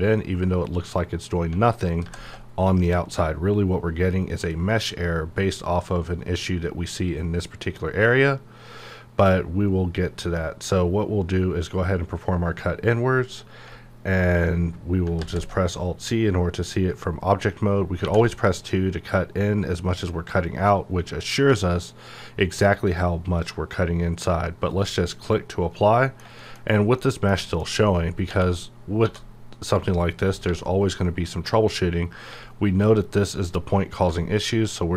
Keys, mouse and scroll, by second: 13.6 alt+Num_Lock, 15.2 alt+z, 24.7 click, 25.8 middle click, 26.4 shift+scroll down 1, 26.6 shift+scroll up 1, 27.0 middle click, 27.7-28.1 scroll up 1, 28.3 Tab, 29.7 click, 29.8 click, 30.4 g, 30.9 right click, 32.3 g, 32.8 right click.